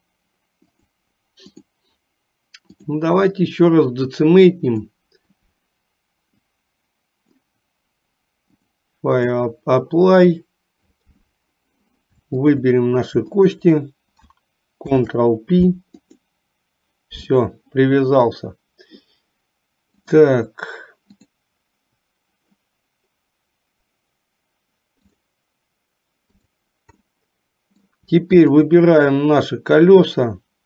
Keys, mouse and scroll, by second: 0.8 click, 1.7-3.2 drag, 5.1 click, 6.7 click, 8.8 click, 12.5 shift+click, 13.5 shift+click, 14.9 ctrl+p, 20.3 click, 21.3 click, 27.2 middle click.